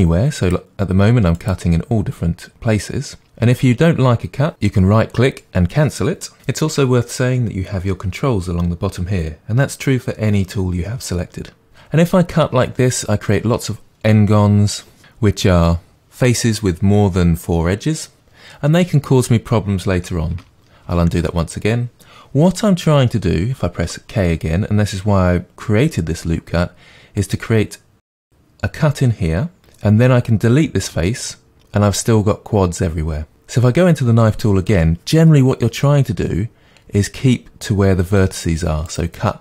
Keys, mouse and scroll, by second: 4.5 right click, 11.7 Return, 20.9 ctrl+z, 23.8 k, 29.6 right click, 34.7 k.